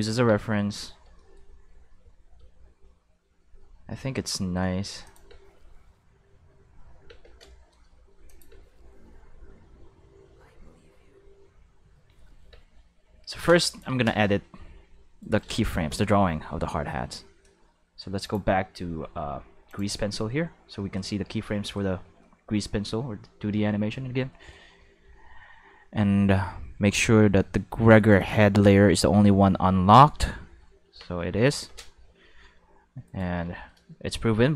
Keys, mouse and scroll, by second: 5.0 click, 5.2 space, 7.0 space, 8.2 click, 8.5 space, 12.5 space, 13.6 click, 15.2 right click, 16.5 q, 18.2 click, 19.6 click, 28.1 click, 30.8 Tab, 31.2 a, 32.0 g, 33.0 right click.